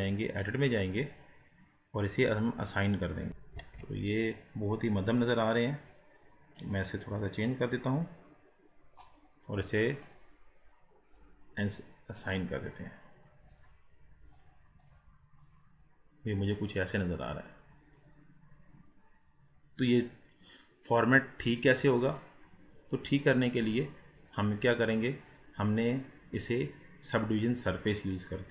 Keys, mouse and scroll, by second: 3.1 click, 3.3 middle click, 3.6 ctrl+z, 5.6-6.7 drag, 10.0-15.2 drag, 15.6-17.0 middle drag, 17.0-17.5 scroll down 5, 17.5-18.0 scroll up 4, 18.0-21.0 middle drag, 22.0 click, 23.2-25.1 drag, 27.5-28.5 drag.